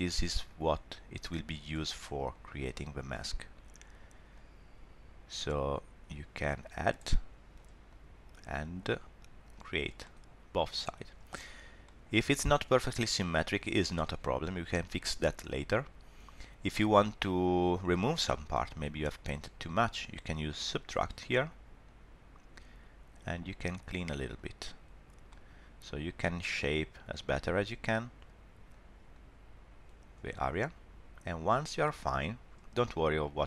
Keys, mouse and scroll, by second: 0.4 click, 2.4 click, 3.3 middle click, 4.4 click, 7.2 middle click, 8.0 click, 10.0 middle click, 11.8 shift+middle click, 12.2 scroll down 1, 12.4 middle click, 18.5 middle click, 18.9-20.6 scroll up 1, 20.6 click, 21.9 click, 24.5 click, 25.3 middle click, 26.6 middle click, 27.5 click, 28.8 click, 29.4 click, 30.3 middle click, 31.7 scroll down 1, 31.8 middle click.